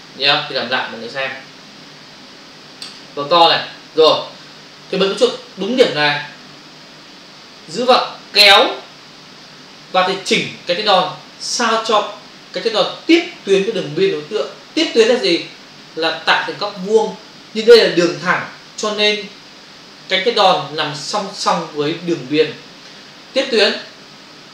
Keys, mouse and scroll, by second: 1.0 Delete, 3.0 ctrl+click, 7.8 click.